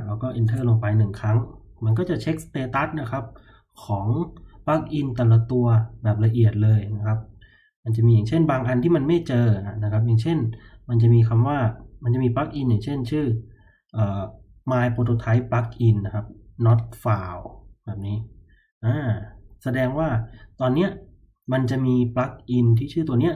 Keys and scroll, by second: 0.4 Return.